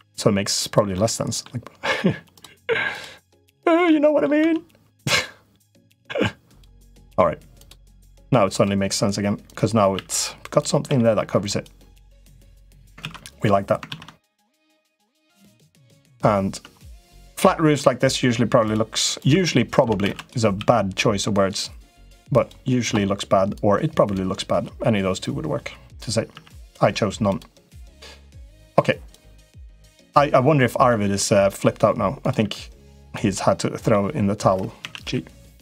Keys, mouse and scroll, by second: 0.8 middle click, 3.4 shift+middle click, 3.6 middle click, 4.2 e, 5.6 click, 6.7 middle click, 7.4 click, 7.8 click, 8.3 click, 9.3 click, 9.8 e, 10.7 s, 12.8 ctrl+z, 13.7 ctrl+z, 14.0-15.0 drag, 15.2 middle click, 15.9 click, 16.7 click, 17.2 middle click, 19.3 middle click, 19.8 shift+d, 20.3 s, 23.4 click, 25.0 click, 26.1 e, 28.9 click, 29.8 click, 31.5 i, 32.2 e, 33.2 middle click, 34.6 a, 34.8 g.